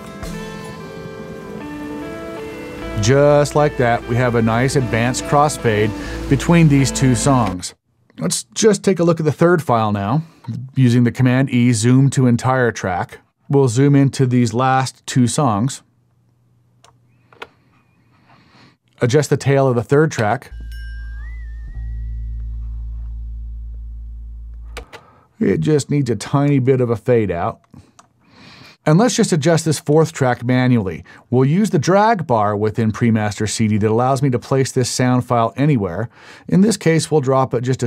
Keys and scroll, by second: 7.5 space, 10.1 super+e, 20.2 space, 24.8 space.